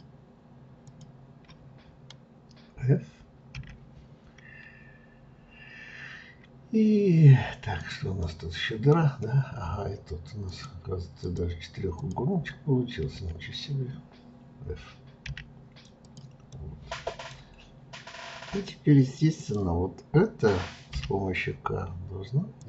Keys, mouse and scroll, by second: 0.8 shift+click, 3.5 f, 5.1 scroll up 1, 7.7 click, 8.2-10.4 middle drag, 10.4 shift+click, 11.2 shift+click, 11.9 shift+click, 16.0 click, 16.5-19.4 middle drag, 19.4 click, 20.9 k.